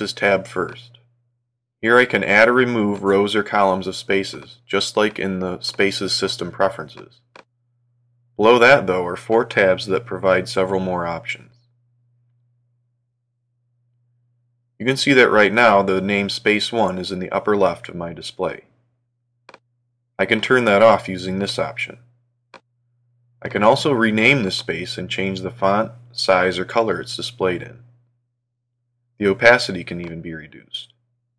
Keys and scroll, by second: 25.4 shift+h, 26.2 Return.